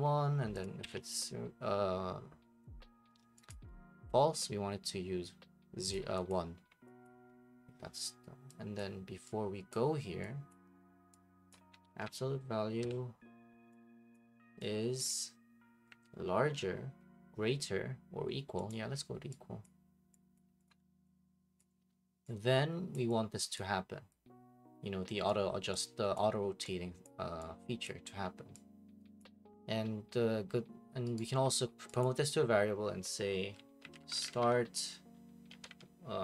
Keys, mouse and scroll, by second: 0.6 click, 0.8-1.3 scroll up 1, 3.5 click, 5.9 click, 6.3 click, 6.6 Delete, 7.0 click, 7.1 Delete, 8.8 click, 9.7 click, 10.5 click, 11.5-12.8 typing, 11.5 click, 14.1 click, 15.0 click, 15.9 >, 18.7 click, 19.6 click, 20.4 click, 20.4 b, 20.6 click, 21.6 click, 22.9 click, 23.6 click, 25.3 click, 26.2 click, 27.0 click, 27.8 click, 29.2 click, 31.1 right click, 32.0 click, 33.6-36.2 typing.